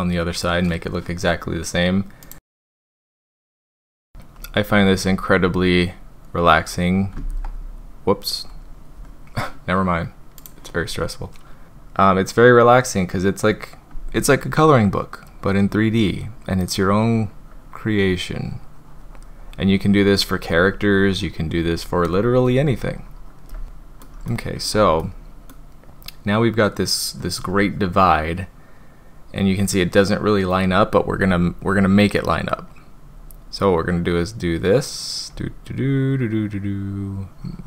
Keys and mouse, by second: 2.2 click, 2.4 shift+click, 2.5 [, 2.5 click, 2.6 click, 3.0 click, 3.2 click, 3.4 ctrl+z, 3.4 click, 3.5 ctrl+z, 3.5 click, 3.7 click, 4.0 drag, 4.4 click, 4.7 drag, 5.1 click, 5.4 drag, 5.8-6.7 drag, 7.1 z, 11.7-13.5 drag, 14.5-15.3 drag, 16.2-23.5 drag, 23.6-24.0 middle drag, 24.3 shift+middle click, 25.0 middle click, 31.7-32.0 drag, 32.2 drag, 32.7-34.7 drag, 35.3-37.6 drag.